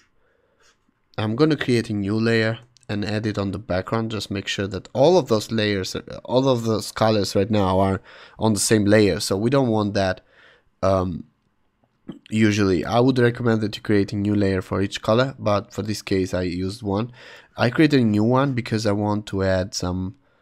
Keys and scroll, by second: 2.0 shift+super+n, 2.5 Return.